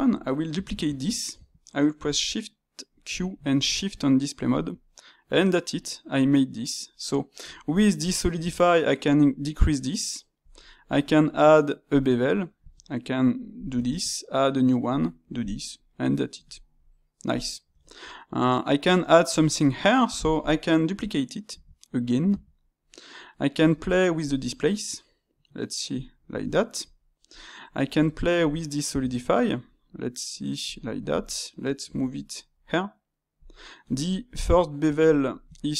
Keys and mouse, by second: 0.6 shift+d, 4.9-7.4 middle drag, 7.4 space, 15.9-21.5 middle drag, 21.5 shift+d, 22.6-23.5 middle drag, 23.5 space, 26.3-30.2 shift+middle drag, 33.8 space.